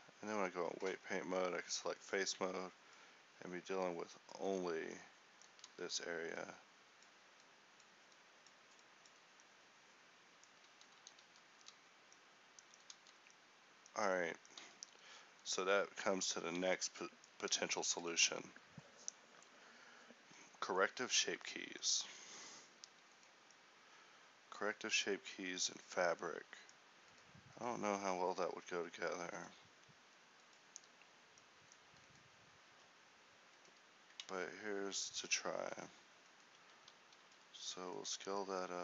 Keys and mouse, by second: 0.3 Tab, 5.6 middle click, 6.3 ctrl+z, 9.5-11.3 drag, 11.3 ctrl+z, 15.2 z, 17.3 ctrl+t, 17.9 a, 22.0 middle click, 22.7 middle click, 24.3-26.5 middle drag, 32.1-33.3 drag, 33.3 Tab, 34.9 ctrl+t, 37.8 alt+s.